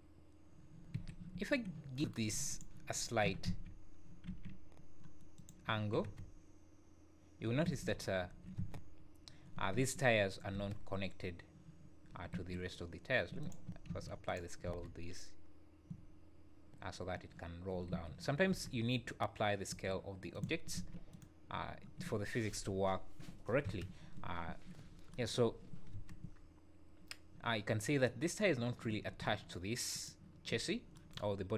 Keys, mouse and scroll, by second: 0.9 Escape, 1.3 `, 2.5 click, 3.0 scroll down 3, 3.3 r, 5.7 `, 6.0 space, 7.7 Escape, 8.0 scroll up 3, 8.2 `, 8.6 space, 9.8 Escape, 10.6 space, 12.4 Escape, 13.4 click, 13.9 ctrl+a, 14.7 space, 17.9 Escape, 18.5 space, 19.7 Escape, 20.3 click, 20.8 ctrl+a, 23.7 space, 24.5 Escape, 24.9 scroll up 3, 25.6 scroll down 2, 25.9 space, 28.9 Escape, 29.9 click, 30.7 scroll up 2.